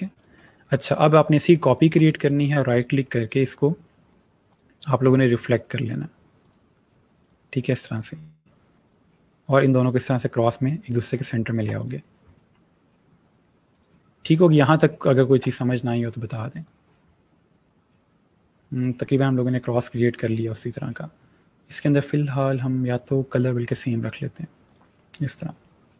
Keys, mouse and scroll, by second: 2.0 right click, 4.3 click, 9.8 click, 10.9 space, 11.0 click, 13.5 click, 14.4 space, 14.5 click, 14.9 space, 15.5 click, 16.0 click, 18.5 click, 19.6 click, 20.5 click, 23.1 shift+click.